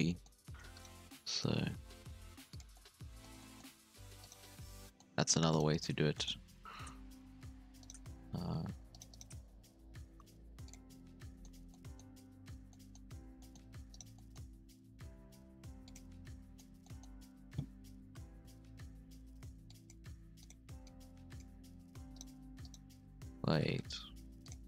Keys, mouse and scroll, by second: 0.0 middle click, 0.4 alt+a, 0.7 alt+shift+right click, 1.0 g, 2.7 middle click, 3.6 scroll up 1, 3.9 alt+a, 4.2 alt+shift+right click, 4.7 scroll down 1, 4.8 middle click, 5.5 shift+right click, 5.7 shift+right click, 6.1 middle click, 6.5 g, 8.1-8.9 scroll up 1, 8.9 shift+right click, 9.1 shift+right click, 9.5 g, 10.8-12.5 middle drag, 12.5 alt+a, 12.7-13.9 middle drag, 13.9 alt+shift+right click, 14.1 middle click, 14.7 g, 16.0 scroll down 1, 16.1-16.7 middle drag, 16.7 Tab, 16.8-17.3 middle drag, 17.3 Tab, 18.1 ctrl+KP_7, 18.7 alt+a, 18.9-19.6 scroll up 1, 19.6 click, 20.0 g, 20.8 click, 21.7 g, 22.6 shift+right click.